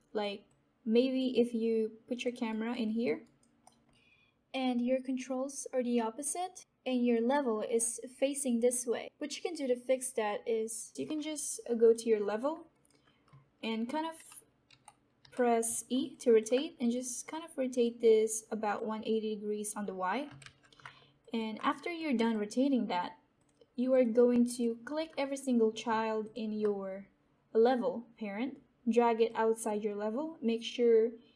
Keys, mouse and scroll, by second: 3.1 alt+right click, 3.5 alt+middle click, 3.6 alt+scroll up 1, 4.0 alt+click, 4.2 alt+right click, 4.4 alt+middle click, 6.2-10.9 drag, 12.7 alt+right click, 14.6-15.2 typing, 16.0 alt+click, 16.5 alt+click, 17.2 click, 20.3 ctrl+z, 21.1 click, 21.5 alt+click, 21.9 right click, 22.2 alt+click, 24.8-25.8 scroll down 1, 26.2 shift+click, 27.0-28.7 scroll up 1, 29.2-31.3 drag.